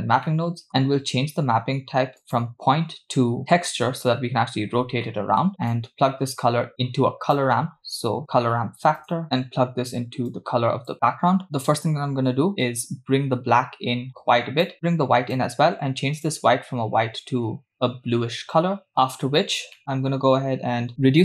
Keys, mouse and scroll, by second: 0.3 middle click, 2.2-3.5 drag, 5.0 middle click, 5.7 click, 5.9-9.2 drag, 10.3 click, 12.6-14.7 drag, 15.1 click, 16.2 click, 18.9 middle click, 19.8 middle click, 20.0-20.9 scroll up 2, 20.9-21.2 drag.